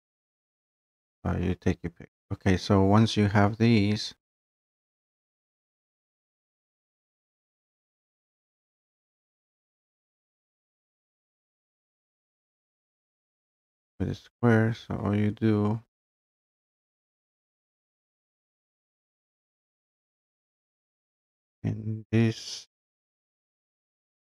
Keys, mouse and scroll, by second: 0.9 click, 3.6-4.9 drag, 7.0-8.0 drag, 8.1-9.7 typing, 10.0 click, 11.3 click, 11.7 click, 12.0 click, 12.9 click, 21.2 click.